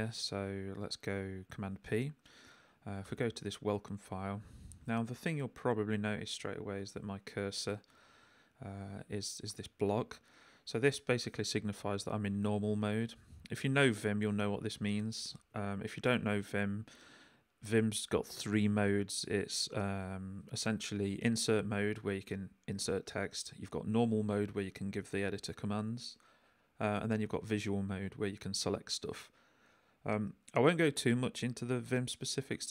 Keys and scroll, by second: 3.0 Return, 6.8 j, 9.2 k, 10.8 j, 12.0 l, 12.5 k, 13.0 j, 13.5 l, 14.8 w, 16.2 l.